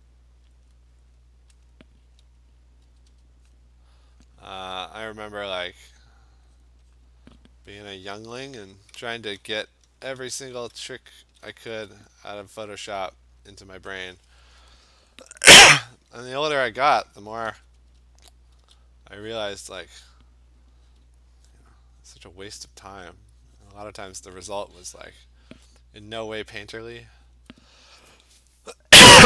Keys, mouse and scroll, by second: 0.1 click, 0.7 click, 1.1 click, 1.7 click, 2.9 ], 3.2 ], 3.6 click, 5.2 click, 6.0 click, 6.6 click, 7.0 click, 8.5 ctrl+z, 9.2 ctrl+z, 9.8 ctrl+alt+z, 10.2 ctrl+alt+z, 10.6 ctrl+alt+z, 11.3 ctrl+z, 11.7 ctrl+z, 13.0 click, 13.6 click, 13.9 click, 17.4 ], 17.6 ], 17.9 ], 18.6 [, 19.3 click, 20.2 click, 21.6 click, 22.3 click, 22.5 click, 22.9 click, 23.1 click, 23.8 click, 24.5 click, 24.7 click, 25.4 click, 25.7 click, 26.1 click, 26.5 click, 26.8 click, 27.2 click, 27.4 click.